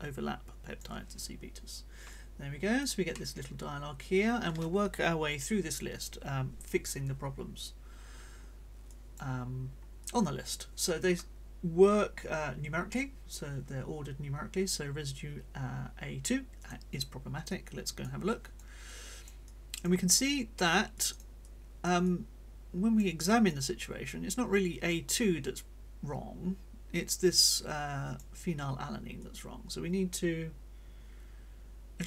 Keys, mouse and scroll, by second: 2.1 click, 3.1-4.6 middle drag, 8.8 click, 10.0 middle click, 16.6 click, 17.4 middle click, 18.3 click, 18.8-20.0 drag, 21.0 click, 21.4-28.4 drag, 22.0-23.2 right drag, 23.6-28.4 right drag, 29.2-32.0 drag.